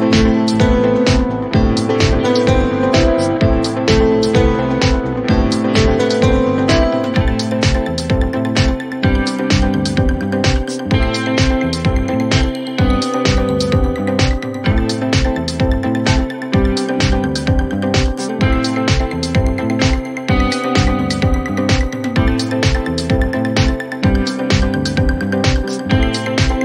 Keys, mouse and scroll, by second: 1.1 click, 20.4 click, 23.3 click.